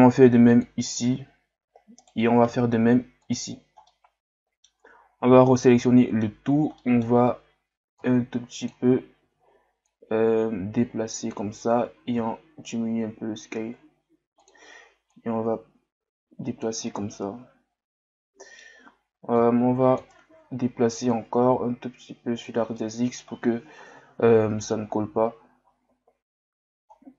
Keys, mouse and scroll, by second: 0.5 click, 2.0 right click, 3.2 click, 3.8-4.9 middle drag, 4.9 a, 5.6 scroll down 1, 5.8 middle click, 6.4 scroll up 1, 6.8-8.0 middle drag, 8.0-9.3 shift+drag, 9.3 ctrl+z, 9.8-11.8 drag, 11.8 s, 15.2-16.9 drag, 16.9-19.3 middle drag, 19.3-20.3 shift+drag, 20.3 ctrl+z, 21.1-22.8 drag, 22.8-23.9 middle drag, 23.9 KP_1, 24.8-25.2 scroll down 2, 25.4-25.9 scroll up 1, 25.9 Tab, 27.0-27.1 scroll down 1.